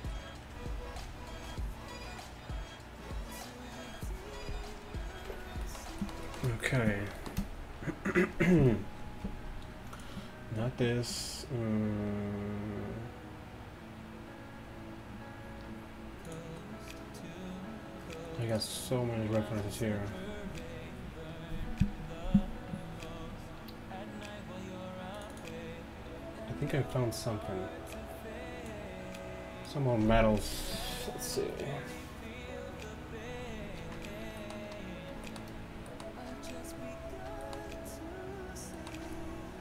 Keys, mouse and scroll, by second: 5.7-11.0 middle drag, 34.5-35.9 middle drag.